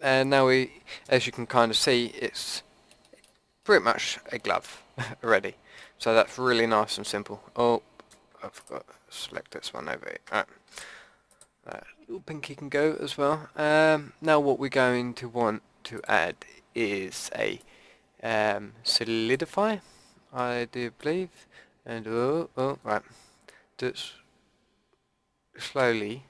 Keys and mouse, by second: 1.4 Tab, 3.3 Tab, 8.6-10.7 drag, 9.3 ctrl+KP_Add, 10.7 Delete, 15.9-19.3 drag, 21.0-23.0 drag.